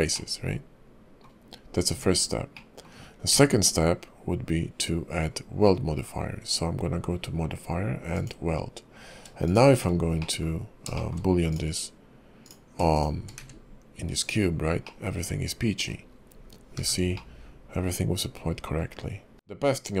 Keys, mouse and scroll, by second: 0.1 middle click, 1.9 Tab, 2.5 middle click, 3.3 q, 9.9-10.2 scroll down 3, 10.2 middle click, 11.0 shift+middle click, 11.5 click, 12.4 click, 12.9 shift+click, 13.4 q, 14.8 middle click, 16.0-16.8 scroll up 3, 16.8 h, 17.1 middle click, 19.5 shift+middle click, 19.5 scroll down 2.